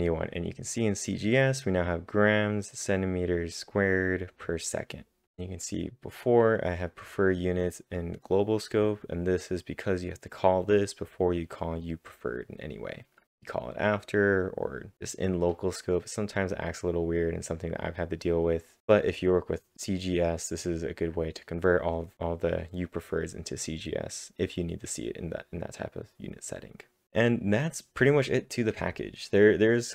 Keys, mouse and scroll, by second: 0.1-0.8 typing, 1.9 click, 1.9 Return, 3.0 click, 3.0-3.3 scroll down 1, 4.5 click, 6.6 click, 6.7 click, 7.3 double click, 8.3 click, 8.4-10.5 drag, 10.5-11.3 scroll down 5, 11.3-11.7 scroll down 2, 11.7 click, 11.7-14.9 drag, 18.4 click, 18.4-18.8 scroll down 1, 19.0 click, 19.9-20.4 scroll up 11, 21.0 click, 22.0-22.8 scroll down 3, 22.8 click, 27.0 click, 27.0 scroll down 1, 27.6 click, 27.6-28.1 scroll up 5.